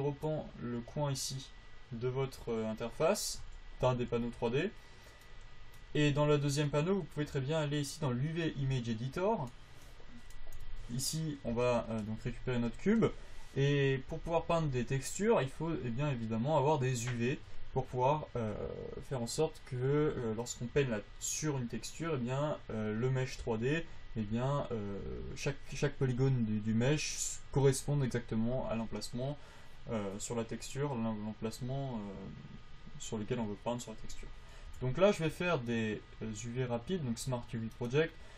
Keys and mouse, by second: 4.2 t, 10.9 Tab.